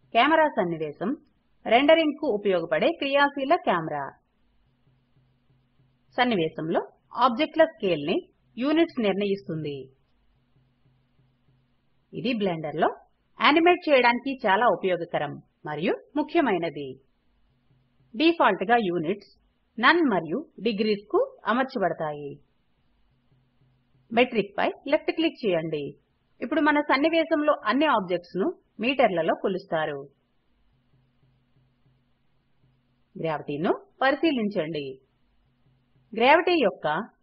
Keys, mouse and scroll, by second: 21.5 click, 22.0 click, 26.5 click.